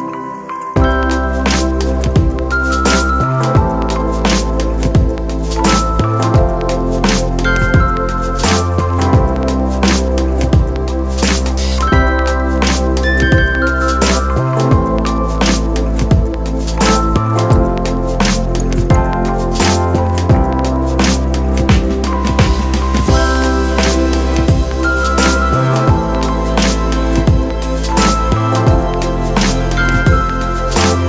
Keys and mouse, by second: 0.4-2.8 shift+drag, 4.0 shift+click, 5.1 shift+click, 7.4 shift+click, 9.2 shift+click, 10.0 shift+click, 11.1 shift+click, 14.3-17.7 shift+drag, 18.8 shift+click, 20.2 shift+click, 21.0-24.9 shift+drag, 24.9-26.6 shift+drag, 27.1 shift+click.